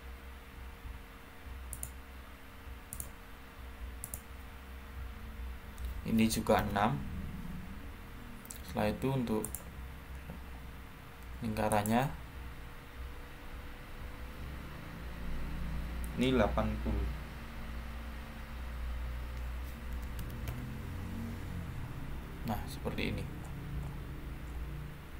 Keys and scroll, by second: 5.1-6.0 typing, 6.5 Return, 13.0 typing, 19.8-20.1 typing, 20.4 Return.